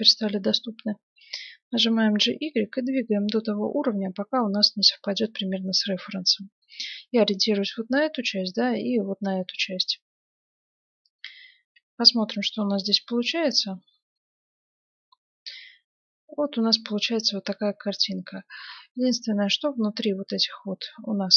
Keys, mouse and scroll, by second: 0.9 g, 11.4 Tab, 12.3 z, 14.1-16.0 middle drag, 17.7-21.3 middle drag.